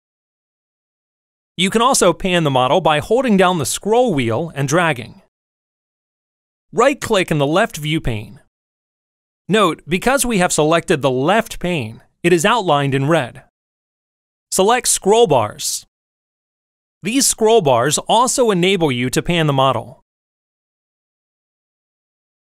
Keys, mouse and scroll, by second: 2.7-5.6 middle drag, 8.7 right click, 15.6 click, 17.7-19.2 drag, 20.3-21.7 drag.